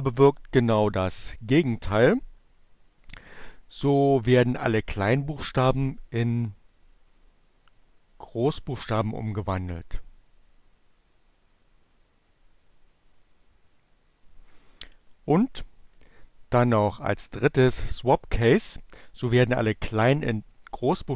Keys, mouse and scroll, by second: 7.1-9.2 drag.